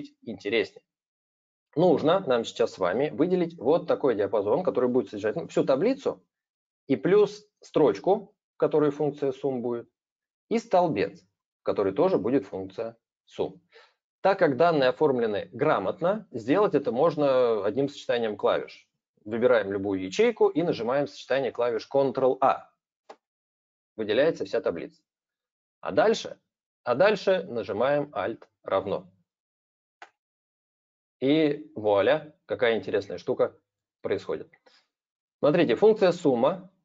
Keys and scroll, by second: 22.9 ctrl+a, 29.7 alt+=.